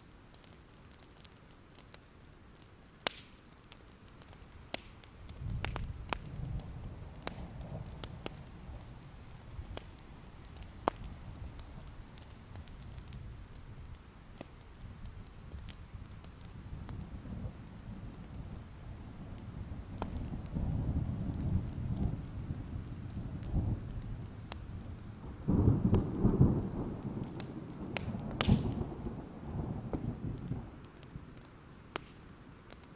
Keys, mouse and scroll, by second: 4.8 shift+click, 5.9-18.9 drag, 19.2 alt+scroll down 1, 19.4 alt+scroll up 1, 20.3-24.7 drag, 24.8 ctrl+z, 25.5-31.4 drag, 31.6 alt+scroll down 1, 32.6 click.